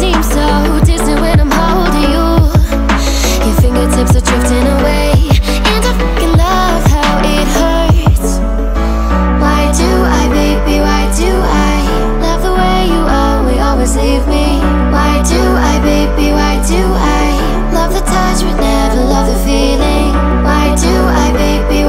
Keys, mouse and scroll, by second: 0.1 click, 3.1 x, 8.2-19.4 drag, 19.4 x.